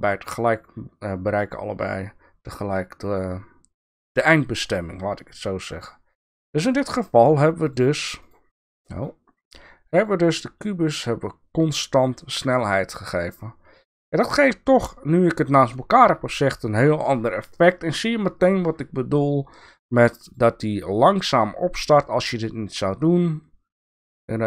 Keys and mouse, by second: 5.8 click, 8.2 click, 8.9 click, 9.9 click, 20.2 click, 21.4-24.2 drag.